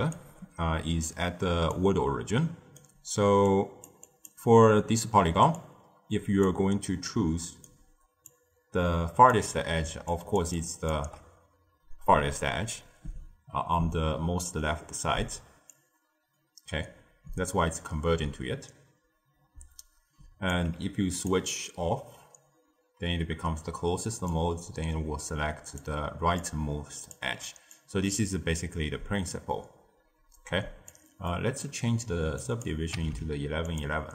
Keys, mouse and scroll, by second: 0.0-5.3 typing, 1.0 click, 2.3 right click, 3.4 click, 4.0 click, 5.5 click, 6.4-6.9 d, 7.0 right click, 7.6-8.1 d, 8.2-9.3 drag, 9.3-10.9 typing, 10.0 click, 10.5 click, 15.6-18.7 drag, 21.1 click, 24.2-26.0 drag, 26.0 d, 26.3-27.1 drag, 27.1 d, 27.7-30.7 drag, 31.2-32.3 middle drag, 32.3 click, 33.1 1.